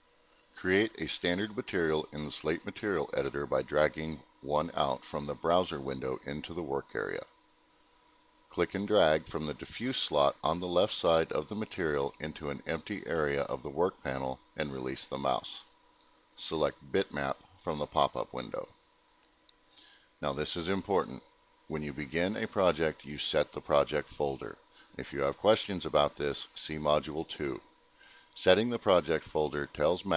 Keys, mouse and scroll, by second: 0.0 alt+middle click, 1.4 click, 2.2 right click, 3.4 click, 4.1 ctrl+click, 5.1 click, 8.1 click, 9.8 scroll up 2, 11.1 middle click, 13.5 click, 21.6 click, 28.3 click.